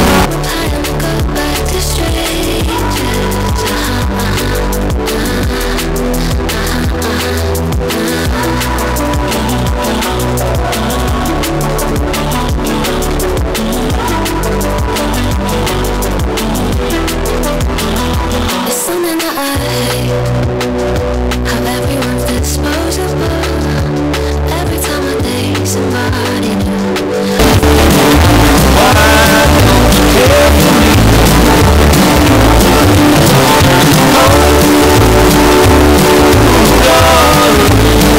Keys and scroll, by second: 0.2 Page_Down.